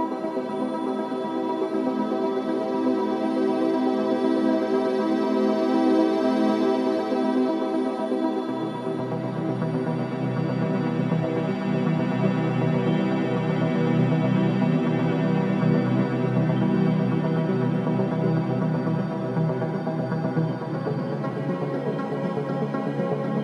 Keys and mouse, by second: 0.3 click, 0.9 g, 6.5 g, 11.2 click, 13.4 alt+click, 14.0 alt+click, 14.6 click, 15.0 click, 15.9 click, 16.7 click, 18.5 click, 19.6 alt+click, 21.4 alt+click.